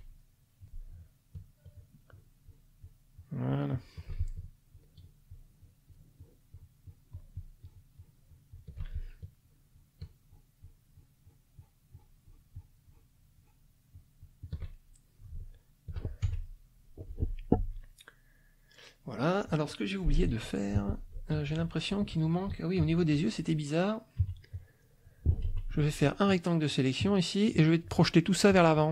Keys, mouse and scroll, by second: 0.2 shift+middle click, 0.6 click, 1.7 shift+click, 2.1 shift+click, 2.4 shift+click, 3.0 shift+click, 3.3 shift+click, 3.5 shift+click, 4.7 shift+click, 5.8 shift+click, 6.4 shift+click, 6.7 shift+click, 7.1-8.3 shift+drag, 8.5 shift+click, 9.4-11.5 shift+drag, 11.6 shift+click, 12.3 shift+click, 13.3 shift+click, 13.9 shift+click, 14.7 shift+middle click, 16.2 shift+F1, 16.5 shift+middle click, 17.2 click, 18.5 click, 18.8 middle click, 19.0 click, 19.4-21.4 middle drag, 21.4 ctrl+KP_5, 22.8 ctrl+KP_5, 24.2 KP_Subtract, 24.8 middle click, 25.5 F1, 25.8-26.9 drag, 28.5 click.